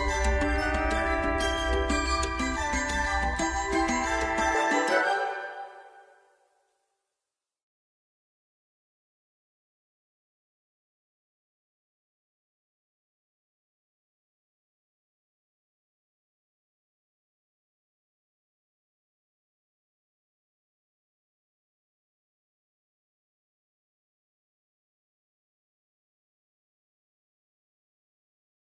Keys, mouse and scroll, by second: 1.8 click, 4.6 click, 8.4 alt+scroll down 1, 9.4-9.8 alt+scroll up 1, 10.5 click, 13.4 ctrl+s, 18.5 click, 25.1 click.